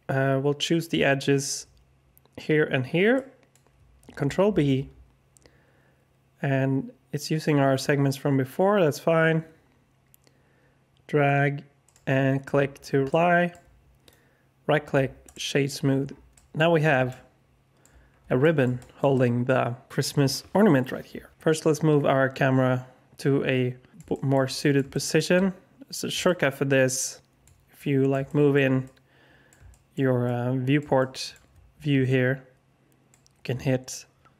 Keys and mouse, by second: 3.1-3.5 drag, 4.5 ctrl+b, 12.5 Tab, 13.1-13.5 drag, 14.0 click, 16.3 alt+drag, 17.0-17.8 alt+drag, 18.4 middle drag, 18.7 alt+shift+drag, 19.1-19.9 alt+drag, 24.1 alt+shift+drag, 24.5 middle drag, 24.9 shift+click, 25.3 middle click, 25.4 alt+click, 26.2 shift+middle click, 26.3 alt+shift+click, 26.8 shift+middle click, 26.9-27.4 alt+shift+drag, 27.7 middle click, 27.8-28.5 alt+shift+drag, 28.8 middle click, 28.9 alt+click, 29.6 shift+drag, 30.2 middle click, 30.3-31.3 alt+drag, 32.1-33.0 alt+shift+middle drag.